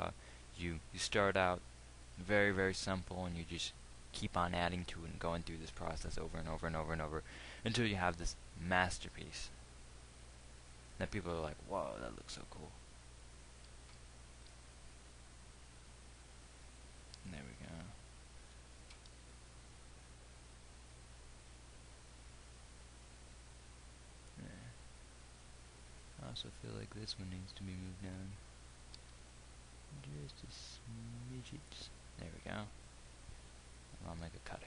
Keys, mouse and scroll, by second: 14.3 g, 17.7-19.3 drag, 19.3 g, 29.3 g.